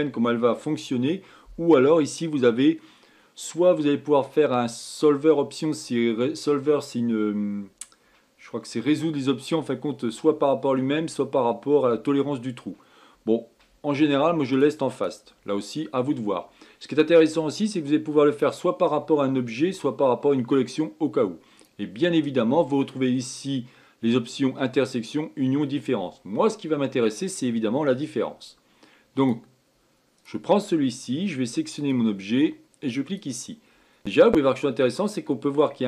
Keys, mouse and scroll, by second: 2.5 click, 15.0 click, 15.4 click, 18.9-21.9 drag, 22.0 click, 27.5-29.6 middle drag, 29.6 click, 30.7 click, 32.3 click, 34.2-35.1 scroll up 9, 35.1-35.8 middle drag.